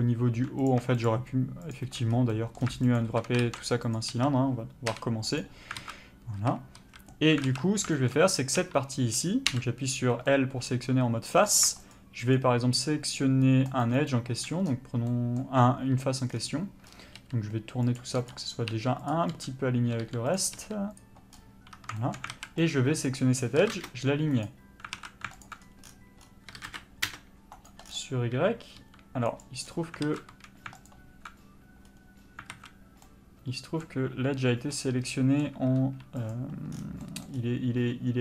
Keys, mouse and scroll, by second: 0.7 click, 2.1 scroll up 1, 2.3 middle click, 3.0 alt+shift+click, 4.0 ctrl+e, 4.1 a, 5.4 u, 5.8 alt+a, 6.8 a, 7.5 alt+a, 7.6 scroll down 1, 7.9 shift+middle click, 8.6 3, 9.5 l, 10.3 middle click, 11.9 shift+click, 17.2 r, 18.2 g, 18.7 r, 19.1 click, 19.3 g, 20.3 click, 20.6 r, 21.0 click, 21.7 1, 22.3 alt+a, 22.7 alt+click, 23.6 s, 24.5 right click, 25.0 alt+a, 25.4 alt+click, 26.5 s, 28.8 g, 30.0 alt+a, 30.9 alt+click, 31.9-32.5 scroll up 1, 32.5 alt+a, 33.1 middle click, 35.8 3, 36.2 click.